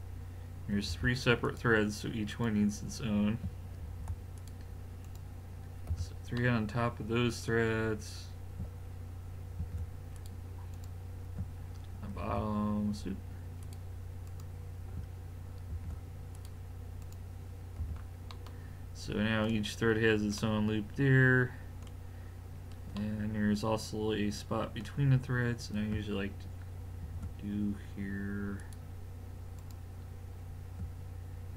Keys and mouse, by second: 0.9 ctrl+r, 3.8 ctrl+r, 5.9 a, 6.4 middle drag, 8.3-9.4 middle drag, 9.6 ctrl+r, 12.2 ctrl+r, 15.7 ctrl+r, 17.8 a, 20.3 middle click, 22.6-23.8 middle drag, 27.1 ctrl+r.